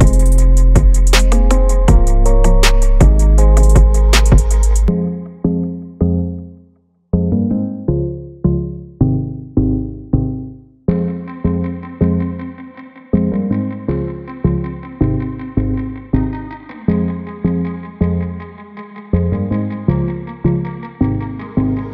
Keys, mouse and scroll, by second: 3.1 scroll up 2, 3.3-3.7 scroll down 1, 3.7 click, 4.2 g, 6.8-8.1 drag, 8.4 g, 13.2 click, 14.0 click, 15.6 click, 17.1 click, 17.9 g, 20.4 i, 20.8-21.9 drag.